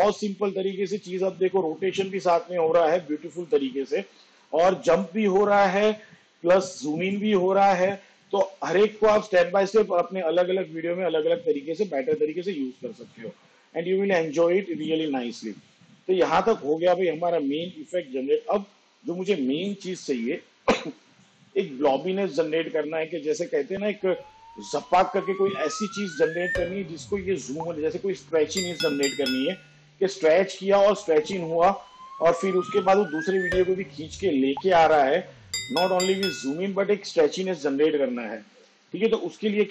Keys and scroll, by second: 12.2 space.